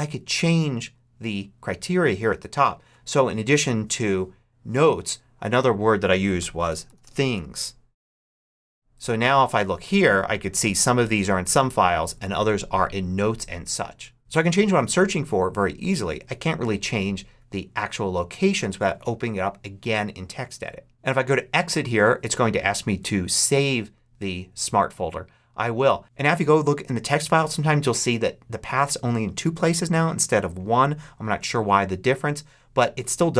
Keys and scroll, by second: 6.3-7.7 typing.